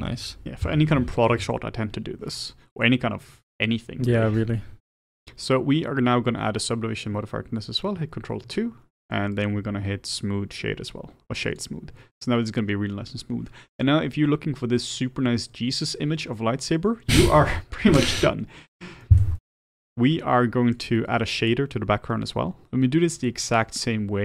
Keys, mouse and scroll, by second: 8.3 ctrl+2, 11.6-19.1 right drag, 19.1-19.6 middle drag, 19.6-20.8 scroll up 3, 20.9 click.